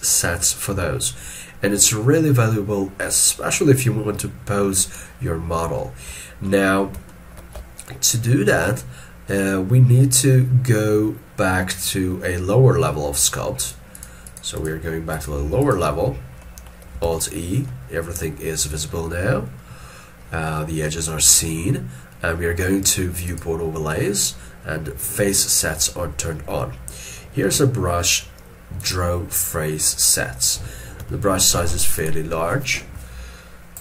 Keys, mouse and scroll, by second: 5.8 shift+middle click, 14.0 double click, 17.1 alt+e, 17.7 middle click, 27.5-28.1 scroll down 1, 31.0 f.